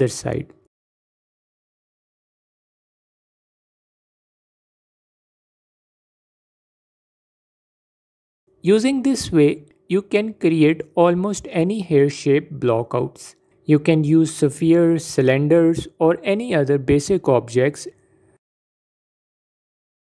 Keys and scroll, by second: 8.2 shift+d, 11.5 shift+d, 12.3 s, 15.0 s.